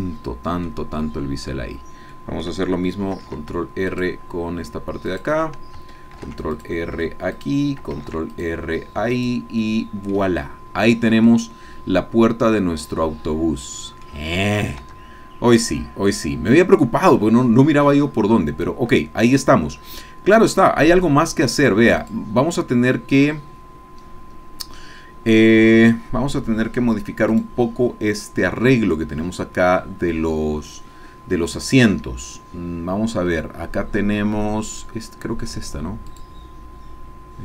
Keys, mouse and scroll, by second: 1.0 click, 2.1 click, 2.6 ctrl+middle click, 3.2 ctrl+r, 3.9 click, 4.2 middle click, 5.2 click, 6.2 ctrl+r, 6.5 ctrl+click, 7.3 click, 8.0 ctrl+r, 8.3 ctrl+click, 9.1 click, 9.6 click, 10.2-10.5 scroll up 1, 10.5-11.2 scroll down 1, 11.2-14.2 drag, 14.4 click, 14.6-14.9 scroll up 1, 14.9 Tab, 15.4 scroll down 1, 15.6-21.7 drag, 22.0 click, 27.3 click, 36.1-37.4 drag.